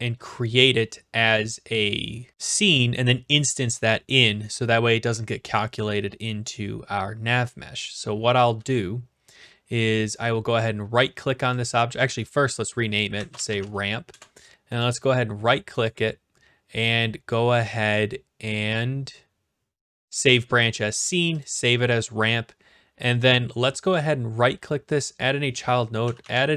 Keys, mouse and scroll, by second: 1.3 scroll down 2, 8.2-9.2 scroll up 1, 10.2 right click, 11.5 click, 12.0 click, 12.9-14.0 typing, 14.1 Return, 14.8-17.0 right drag, 21.2 click, 23.9-25.0 scroll, 25.0 click, 25.8-26.5 typing.